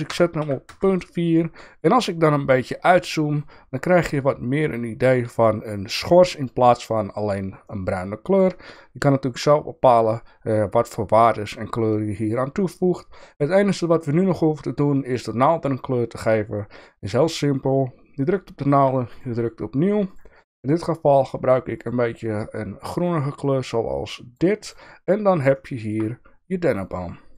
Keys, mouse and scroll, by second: 2.5 click, 2.8 middle click, 7.6 shift+middle click, 8.7 shift+middle click, 13.8-14.2 shift+middle drag, 25.5 shift+middle click, 26.8 click.